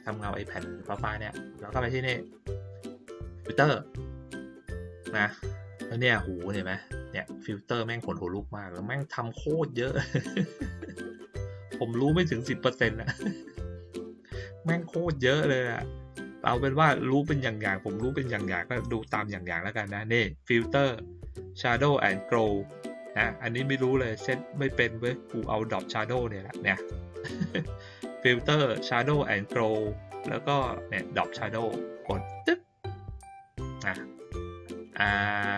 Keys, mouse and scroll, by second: 4.2 click, 32.3 click, 34.3-35.4 drag.